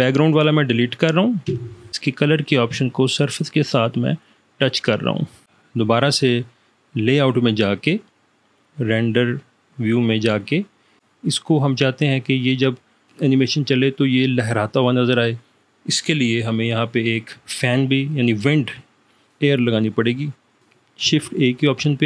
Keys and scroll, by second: 1.5 Delete, 21.2 shift+a.